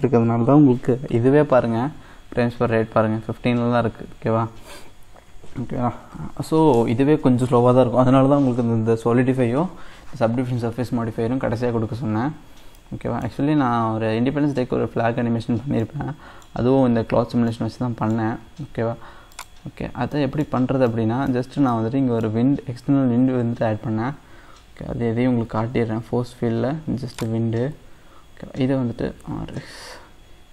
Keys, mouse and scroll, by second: 12.6 scroll down 1, 12.8-15.5 middle drag, 15.5-15.9 scroll up 2, 15.9-17.1 middle drag, 17.1-17.6 scroll up 1, 17.6-19.4 middle drag, 19.4 click, 19.9 scroll down 1, 20.2 middle click, 20.7 scroll down 1, 20.9-23.3 middle drag, 23.3 shift+a.